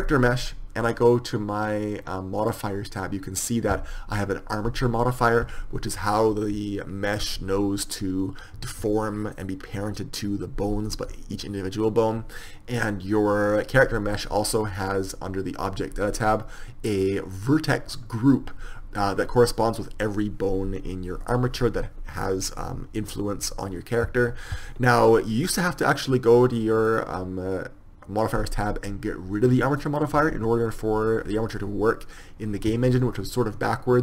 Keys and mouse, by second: 25.9-34.0 right drag.